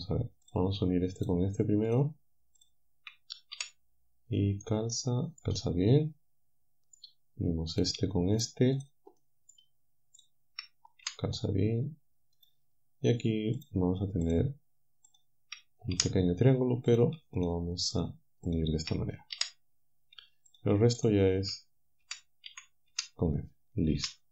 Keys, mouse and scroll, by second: 0.5 click, 1.2 shift+click, 1.9 shift+click, 2.6 shift+click, 3.6 f, 4.6 right click, 5.9-7.2 right drag, 7.8 right click, 8.4 shift+right click, 8.8 shift+right click, 9.2 shift+right click, 10.2 shift+right click, 11.1 f, 13.6 shift+right click, 14.3 shift+right click, 15.1 shift+right click, 16.0 f, 16.9 shift+click, 17.4 shift+click, 18.0 shift+click, 18.5 shift+click, 19.4 f, 20.5 click, 21.0 shift+click, 22.0 f, 24.0 a.